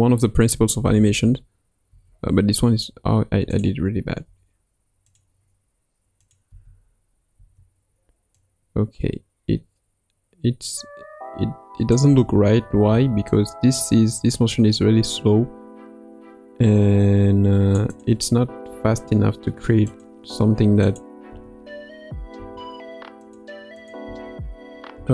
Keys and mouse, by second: 0.8 space, 1.9 space, 3.5 click, 4.2 g, 6.2 click, 6.5 space, 8.3-11.9 drag, 8.3 space, 12.1 space, 12.7 space, 13.3-17.7 drag, 17.9 click, 18.6 g, 20.9-21.3 drag, 21.3 space, 22.3 space, 23.9 click, 24.1 space, 24.9 space.